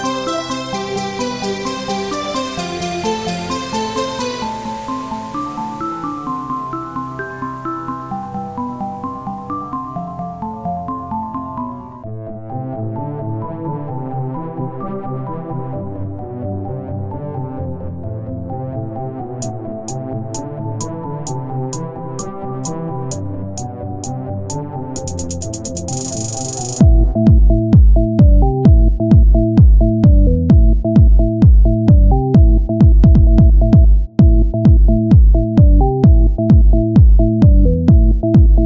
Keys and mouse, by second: 0.6-1.7 drag, 1.3 middle click, 1.7 Tab, 2.8 Tab, 4.1 Tab, 5.9 Tab, 7.2-8.4 drag, 8.4 Tab, 10.3 Tab, 10.9 z, 12.8 z, 13.4 Tab, 14.6 Tab, 15.0 click, 15.8 z, 16.1 c, 18.2 c, 18.4-20.7 drag, 18.5 z, 20.9 Tab, 23.9 Tab, 25.0 z, 26.3 z, 26.3-27.5 drag, 27.6 Tab, 29.8 click, 34.3 Tab, 34.7-36.5 drag, 37.3 click, 37.6 ctrl+z, 38.1 s.